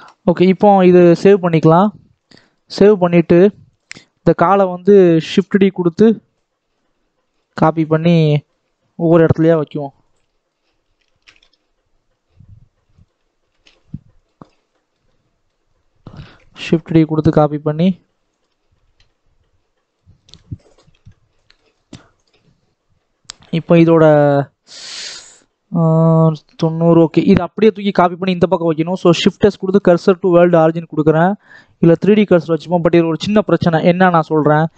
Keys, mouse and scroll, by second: 2.5 click, 2.9 scroll down 1, 3.2 middle click, 3.6 click, 4.0-5.8 middle drag, 5.8 shift+d, 7.4-8.9 middle drag, 8.9 r, 10.1 shift+middle click, 10.4 shift+scroll down 1, 10.5-11.6 scroll up 1, 11.6 shift+d, 13.3 r, 14.2-14.6 scroll down 4, 14.6 shift+middle click, 15.5-16.8 scroll up 1, 16.8 shift+d, 18.6 r, 20.0 scroll down 2, 20.2 middle click, 20.9 alt+a, 21.2 scroll down 1, 21.2 shift+middle click, 21.6-22.2 scroll up 1, 22.2 click, 24.8 click, 28.3-29.8 scroll down 3, 29.8 shift+s, 30.0 scroll up 2, 30.4-32.4 right drag, 30.4 shift+middle click, 32.4-33.4 drag, 33.4 scroll down 2, 33.6-34.7 scroll up 2.